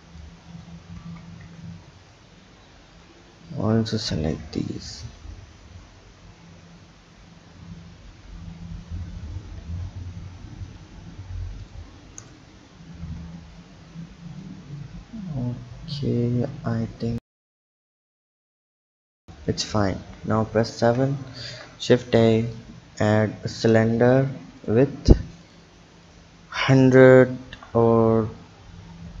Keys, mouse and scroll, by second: 0.2 click, 1.0 ctrl+z, 1.9 shift+click, 2.9 shift+click, 3.8 shift+click, 4.9 ctrl+b, 9.6 Tab, 10.6-11.6 right drag, 11.6 click, 13.0 w, 14.4 click, 17.8 click, 20.0 KP_7, 20.4-21.3 scroll down 2, 21.3 shift+a, 25.5 click, 26.1-29.2 drag.